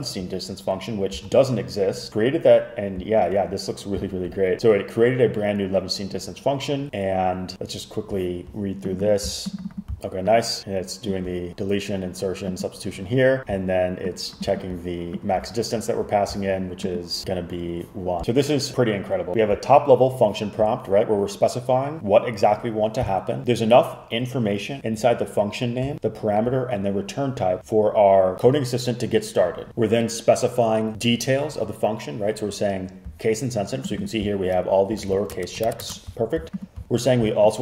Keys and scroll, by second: 10.0 space, 35.1 super+f, 35.4 Return, 35.9 shift+Return.